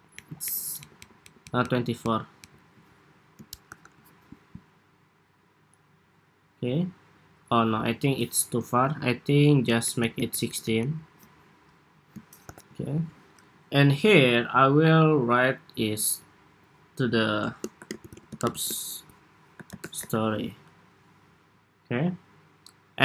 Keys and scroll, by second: 0.0 alt+Up, 0.2 alt+Up, 0.6 alt+Down, 0.9 alt+Down, 1.2 alt+Down, 1.8 alt+Down, 2.1 alt+Down, 3.5 super+-, 9.4 alt+Up, 9.6 alt+Up, 9.8 alt+Up, 10.2 alt+Up, 10.4 alt+Up, 12.2 super+=, 20.3 Escape.